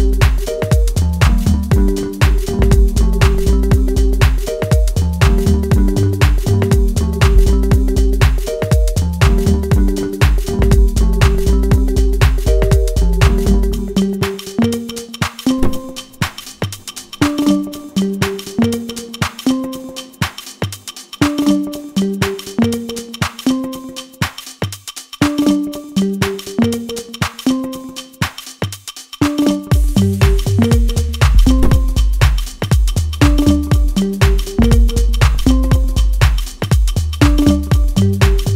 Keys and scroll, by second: 2.6 F2, 22.3 ctrl+space, 30.7 ctrl+space.